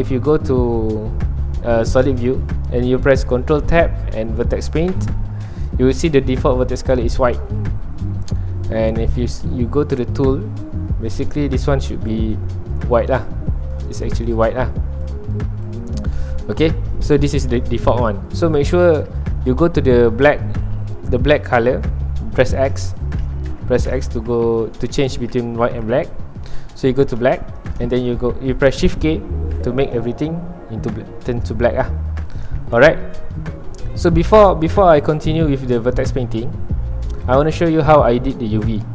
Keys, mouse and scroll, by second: 1.8-4.9 drag, 4.9 ctrl+Tab, 5.5 scroll down 2, 5.7-29.5 middle drag, 29.5 shift+k, 30.7-36.2 middle drag, 36.2 ctrl+Tab.